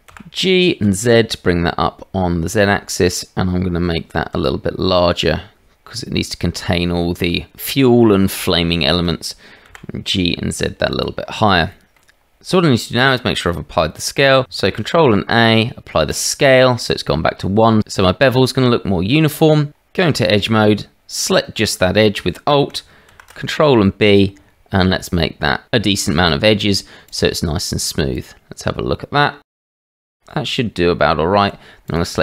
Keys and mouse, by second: 0.1 g, 4.3 s, 9.7 g, 14.6 ctrl+a, 19.4 Tab, 23.1 ctrl+b, 28.1 click, 29.8 middle click, 30.4 Tab, 31.8 click.